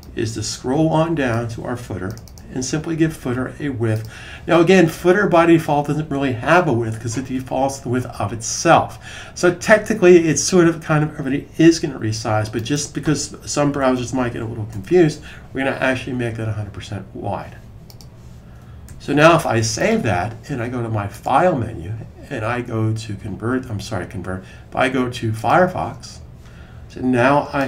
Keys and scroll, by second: 13.1-14.6 typing, 18.7 super+s.